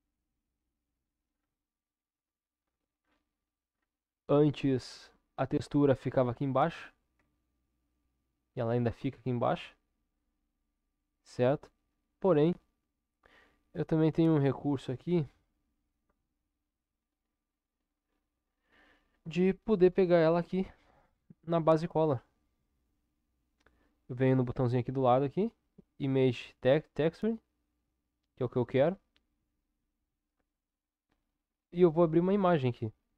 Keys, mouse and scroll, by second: 7.2 Tab, 9.5 click, 12.3 click, 16.0 Tab, 23.3-28.1 drag.